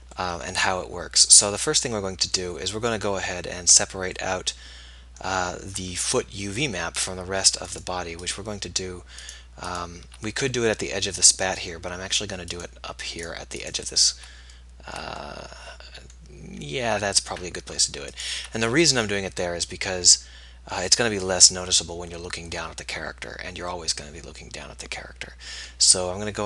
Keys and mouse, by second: 7.8-11.6 drag, 12.6-15.4 right drag, 15.4-20.7 middle drag.